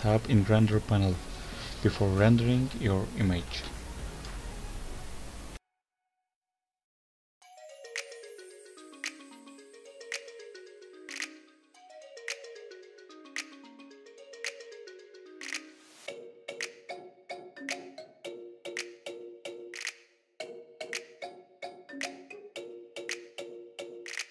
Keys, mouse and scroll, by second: 2.3 Tab, 2.3 click, 2.6 click, 3.2 Tab, 3.6 Tab, 4.4 click, 6.7 click, 6.8-7.5 scroll down 8, 7.2 click, 7.5 click, 8.6 click, 10.9 click, 12.1 click, 12.7 click, 13.5 click, 15.6 click, 16.2 click, 16.4 scroll up 1, 16.7 scroll down 1, 16.8-17.2 scroll down 10, 17.2 click, 17.4 click, 18.9-19.9 scroll down 3, 19.9 scroll up 2, 20.0-20.4 scroll down 1, 20.7 click, 20.8 scroll down 4, 21.1 click.